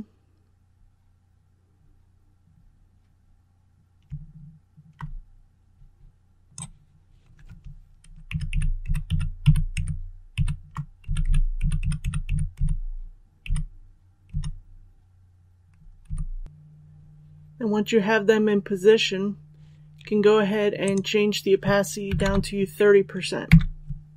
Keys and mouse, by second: 8.4 shift+Right, 8.8 shift+Right, 9.0 shift+Right, 9.3 shift+Right, 9.7 shift+Right, 10.3 shift+Right, 16.0 Right, 16.4 Left, 20.7 click, 22.0 KP_3, 22.2 KP_0.